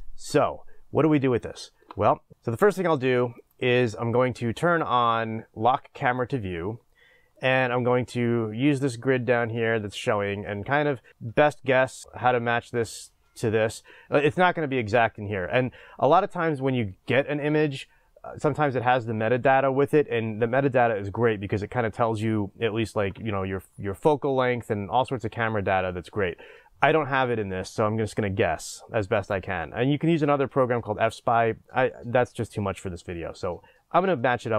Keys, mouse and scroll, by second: 0.0 click, 2.3-6.2 drag, 2.3 n, 7.5-11.3 middle drag, 8.3-9.0 scroll down 2, 11.1 scroll down 2, 11.3-12.0 scroll up 2, 12.0-23.5 middle drag, 29.3 click.